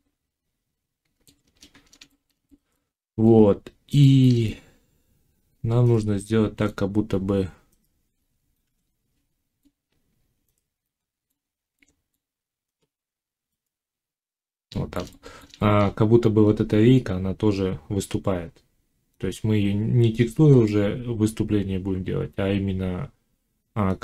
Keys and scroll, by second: 8.5 5.